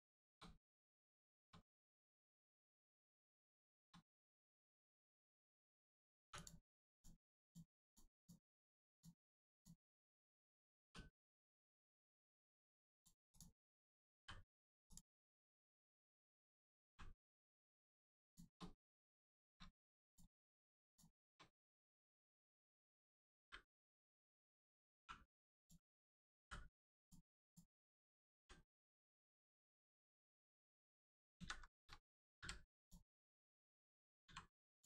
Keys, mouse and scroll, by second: 0.1 shift+middle click, 0.7 middle click, 0.7 middle click, 1.2 shift+middle click, 2.0 middle click, 2.1 middle click, 2.4-2.8 scroll down 1, 2.8 middle click, 3.6 shift+middle click, 4.1 middle click, 4.1 middle click, 6.3 click, 8.7 click, 11.4 click, 11.7 middle click, 13.0 shift+click, 13.3 shift+click, 14.2 m, 14.8 click, 15.2 middle click, 17.5 right click, 18.2 shift+click, 19.0 scroll up 1, 19.3 shift+middle click, 20.0 click, 20.1 click, 20.8 shift+click, 22.6 middle click, 22.7 middle click, 23.4 m, 26.4 m, 27.0 click, 28.4 g, 29.0 right click, 29.6 scroll up 1, 30.6 shift+click, 31.4 alt+z, 32.4 m, 32.7 click, 33.2 right click, 34.2 b, 34.6 click.